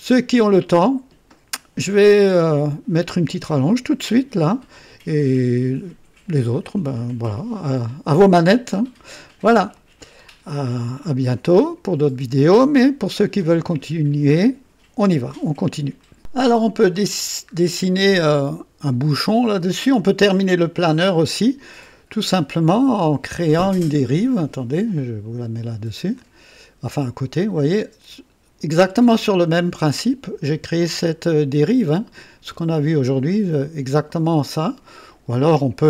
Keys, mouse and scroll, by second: 0.2-1.4 right drag, 7.8-9.6 drag, 15.9 right click, 16.5 scroll up 2, 17.1-17.4 scroll down 2, 22.5 click, 24.2-26.3 drag, 27.2-35.2 drag.